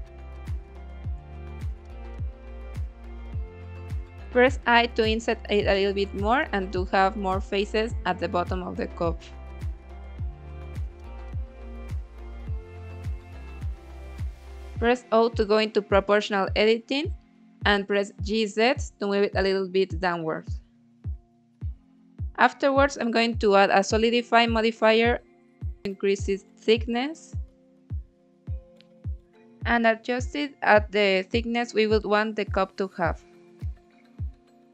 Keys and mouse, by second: 0.7 click, 1.2 g, 1.5 z, 2.7 click, 3.7 i, 6.0 click, 6.3 i, 7.7 click, 8.1 g, 8.4 x, 9.3 z, 10.7 click, 11.2 middle click, 11.7 click, 12.1 shift+click, 12.7 click, 12.9 middle click, 13.2 click, 14.3 o, 15.3 g, 15.5 z, 18.1 click, 19.1 middle click, 21.8-23.6 drag, 25.0 click, 25.5 click, 25.8 click, 26.1-27.1 drag, 27.5-29.8 middle drag, 31.0 click, 31.3 click, 33.0-34.2 middle drag, 34.5-34.7 shift+middle drag.